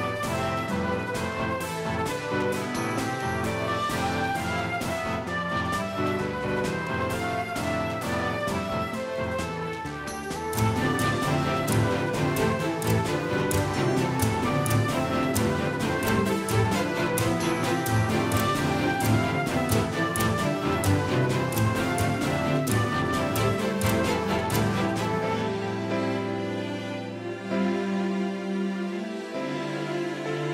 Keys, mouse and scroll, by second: 5.4-10.0 middle drag, 10.0-11.4 drag, 28.3-30.5 drag.